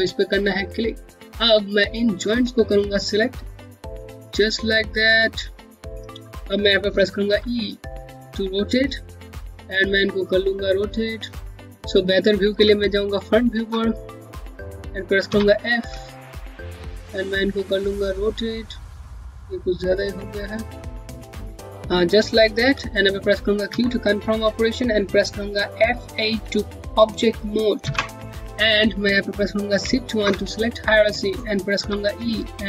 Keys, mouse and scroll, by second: 0.2 right click, 1.8 click, 3.4 q, 3.8 shift+click, 5.8 click, 6.9 e, 10.2 e, 10.3 click, 12.8 space, 14.2 scroll up 1, 14.9 f, 15.8 scroll down 1, 17.2 click, 23.4 q, 25.9 q, 29.9 shift+1, 32.4 click.